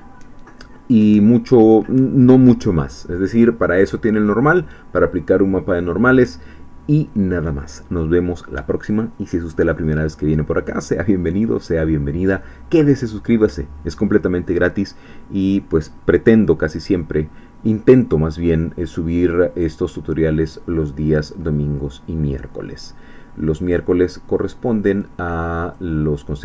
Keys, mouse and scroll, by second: 22.2 click, 23.7-25.1 drag, 25.6 click.